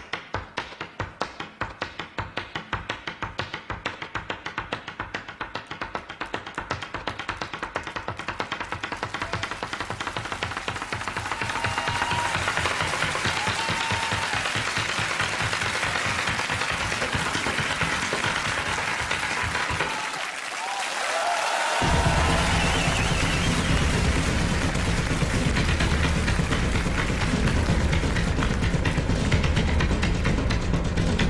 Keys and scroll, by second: 5.5 super+j.